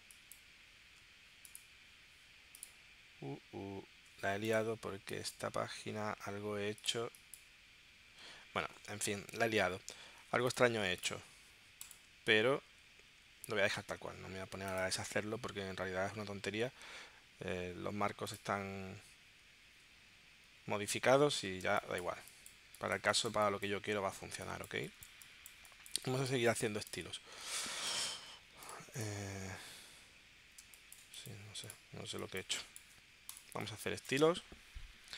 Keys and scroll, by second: 21.6 space, 27.5 space, 30.6 space, 32.9 space.